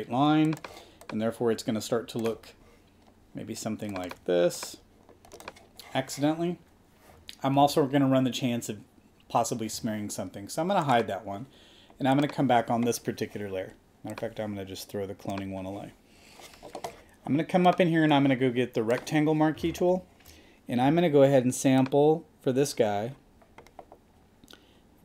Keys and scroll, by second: 7.6 super+z, 19.9 space.